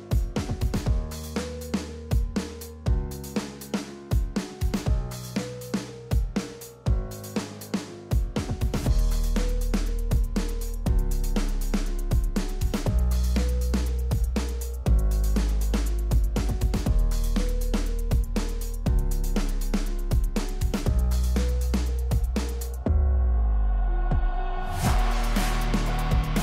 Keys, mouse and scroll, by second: 0.3-1.0 drag, 1.7-2.4 drag, 7.1 space.